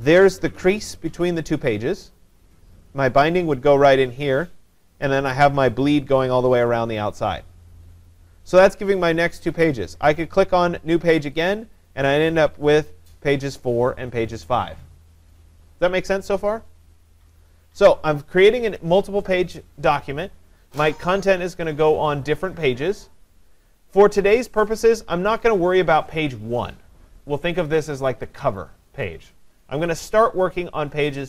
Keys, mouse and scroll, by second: 11.6 click, 12.3 click, 25.4 click.